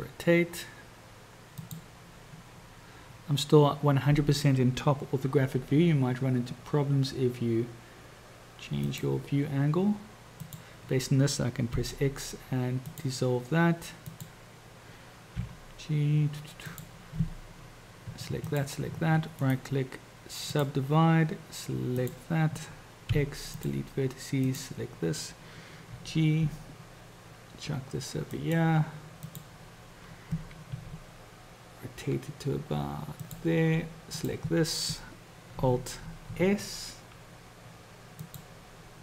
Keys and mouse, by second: 5.7 g, 11.9 x, 14.1 click, 15.7 g, 18.4 shift+click, 19.5-20.9 drag, 22.1-23.1 drag, 23.1 x, 24.5 click, 26.2 g, 29.4-30.8 drag, 30.8 r, 34.2 click, 36.3 alt+s.